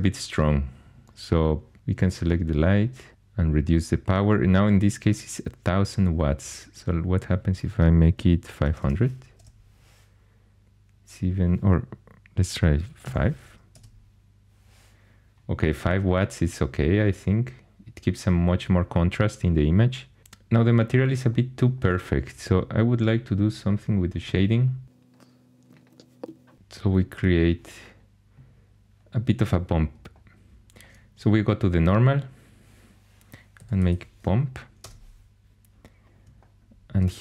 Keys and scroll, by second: 8.2-9.3 typing, 9.3 Return, 13.0 typing, 13.7 Return, 26.2 ., 33.3-34.4 typing, 34.8 Return.